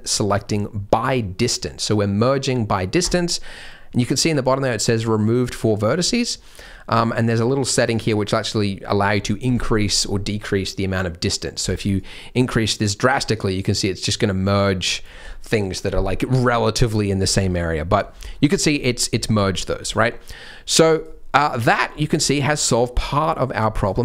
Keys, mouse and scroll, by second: 6.5 click, 7.3 click, 7.8 click, 11.9 click, 18.1-19.2 scroll up 4, 19.2-19.8 scroll down 3, 19.8 click, 20.6 click, 20.9 click, 21.6 click, 21.9-22.2 scroll up 1, 22.2 scroll down 1, 22.5-23.2 scroll down 3, 22.9-23.7 scroll up 3, 23.7 click, 23.7-24.0 scroll up 1.